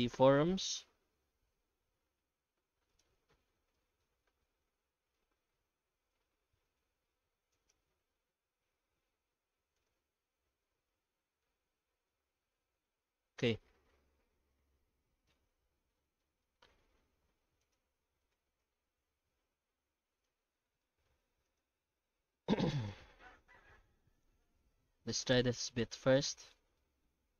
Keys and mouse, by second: 0.3 g, 3.3 Tab, 3.7 middle click, 4.4 shift+middle click, 5.0 Tab, 5.1 middle click, 5.5 shift+middle click, 6.1 q, 7.2 1, 7.5 shift+right click, 9.0 i, 9.9 alt+s, 12.2 Tab, 12.8 middle click, 15.8 Tab, 15.9 middle click, 16.4 shift+middle click, 16.8 3, 17.2 alt+a, 17.6 alt+shift+right click, 18.3 g, 20.3 Tab, 20.8 shift+middle click, 21.5 right click, 21.7 Tab, 22.0 middle click, 22.6 Tab, 22.7 right click, 23.0 Tab, 23.2 middle click, 24.2 shift+middle click, 24.7 3, 25.1 right click, 26.8 shift+middle click, 27.2 q.